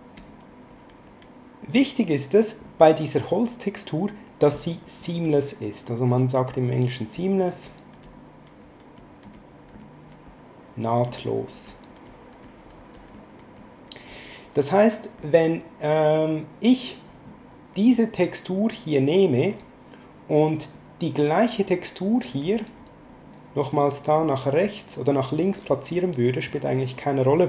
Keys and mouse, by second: 6.5 click, 11.1 click, 22.1 click, 23.5 click.